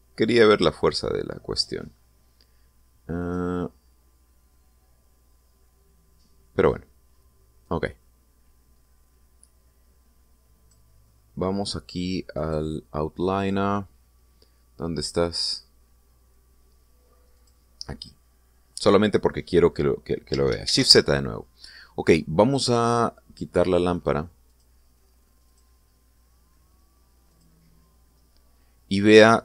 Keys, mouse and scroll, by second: 0.3-4.3 drag, 8.3-11.6 drag, 13.1 click, 18.1 click, 21.4 shift+z, 24.7 click, 25.2 click, 26.2 click, 28.1 click.